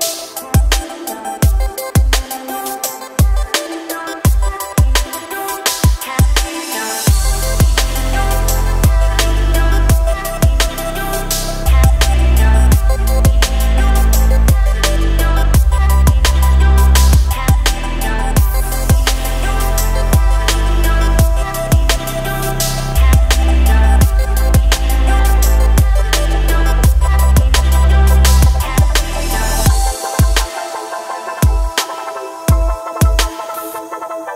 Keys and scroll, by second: 4.2 e, 6.9 e, 14.1 Delete, 16.8 KP_1, 23.0 e, 27.8 s.